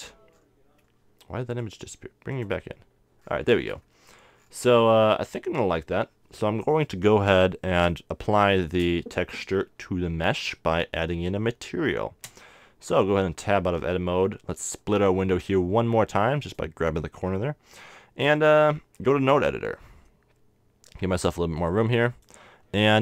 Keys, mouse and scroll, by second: 1.3 middle click, 1.6 click, 10.7 a, 12.4 Tab, 14.8-16.7 drag, 18.4 click, 19.2 click, 21.5-23.0 drag.